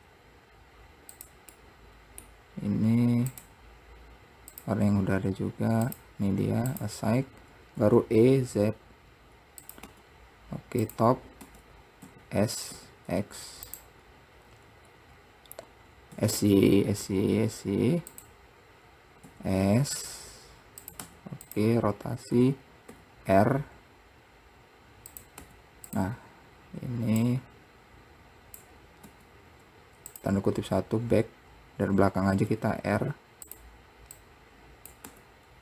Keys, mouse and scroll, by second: 1.8-3.5 middle drag, 3.5-4.7 drag, 6.2-8.0 drag, 8.0 e, 11.6 Tab, 15.3-16.3 scroll down 2, 16.3 s, 22.1-22.7 scroll up 2, 22.7-23.1 scroll down 2, 23.1 r, 26.7-27.2 scroll up 1, 27.4 click, 31.0-32.5 scroll up 1, 32.6 r, 34.4 click.